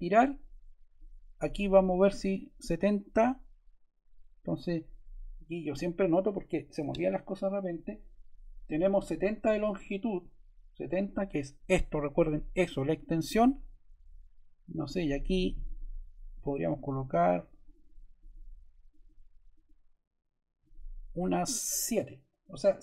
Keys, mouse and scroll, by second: 0.9-2.0 drag, 1.7-2.6 typing.